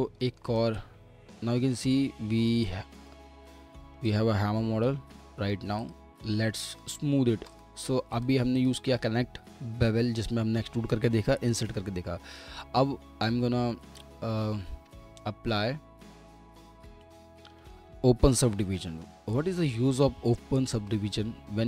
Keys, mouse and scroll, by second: 0.2 middle click, 4.1 shift+click, 8.6 double click, 15.1-16.4 scroll up 1, 20.6-21.3 typing.